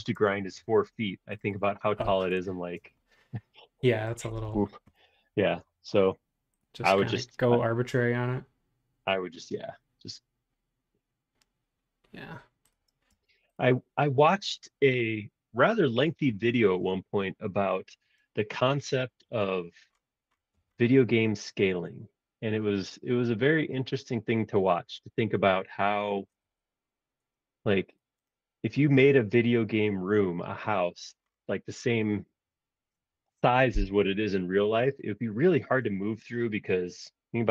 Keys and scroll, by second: 0.0-0.2 typing, 4.5 super+z, 5.6 r, 13.0 space.